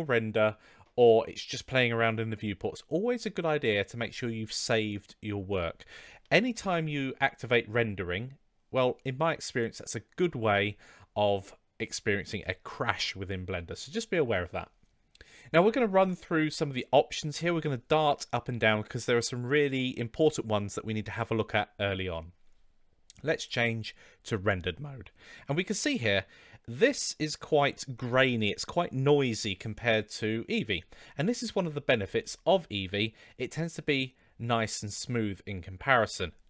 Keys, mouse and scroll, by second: 6.5 ctrl+s, 23.3 click, 31.4-34.7 drag.